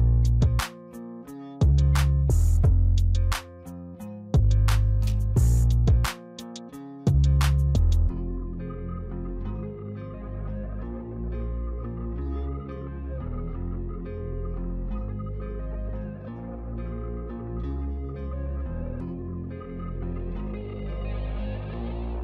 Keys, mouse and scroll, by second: 0.3 click, 1.7 click, 2.6-3.0 scroll down 1, 3.0-3.9 middle drag, 3.9 click, 4.6-5.3 scroll up 1, 5.3-8.5 shift+middle drag, 12.0-15.0 drag, 16.2 click, 17.2-20.3 drag, 20.9-22.2 middle drag.